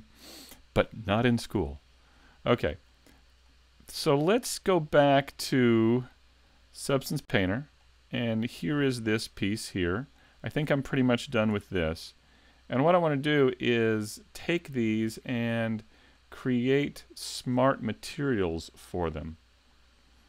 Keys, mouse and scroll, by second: 0.3 middle click, 2.5-3.4 scroll down 2, 2.9 shift+middle click.